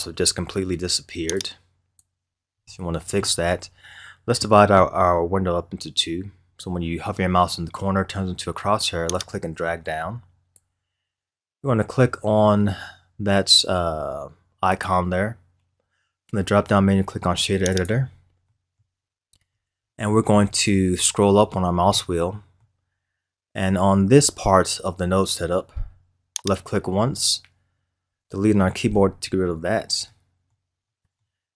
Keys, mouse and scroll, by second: 1.3 click, 2.3 scroll up 1, 2.7-5.7 middle drag, 9.1-12.2 drag, 13.0-17.8 drag, 18.4-19.1 middle drag, 19.1-19.8 scroll up 8, 19.8-21.0 middle drag, 21.0-21.9 scroll up 6, 21.9-23.0 middle drag, 23.0-24.0 scroll up 2, 24.0-25.8 scroll down 6, 25.8-26.4 scroll up 4, 26.4 click, 28.2 Delete, 30.1-31.5 middle drag.